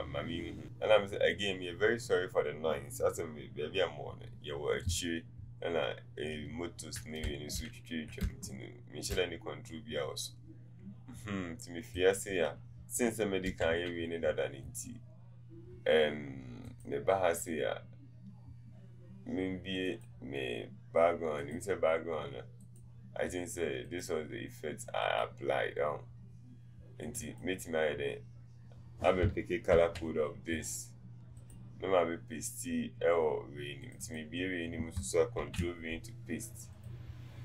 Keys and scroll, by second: 13.7 v.